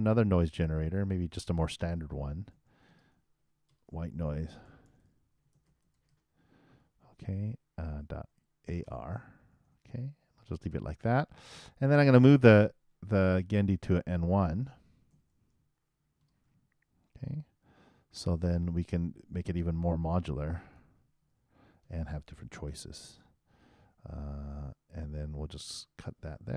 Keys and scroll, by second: 4.0-6.1 typing, 9.0-10.4 typing.